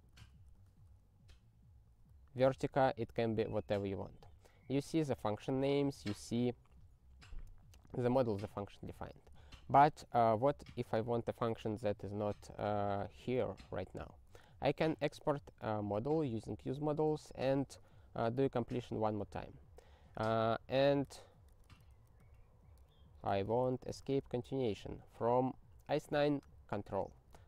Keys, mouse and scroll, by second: 0.1 Return, 0.8 ctrl+alt+i, 2.1 ctrl+v, 9.0 ctrl+g, 9.6 ctrl+p, 13.8 ctrl+e, 14.3 ctrl+e, 15.6 ctrl+n, 16.3 ctrl+b, 17.8 ctrl+alt+i, 20.0-24.4 typing, 27.2 ctrl+alt+i.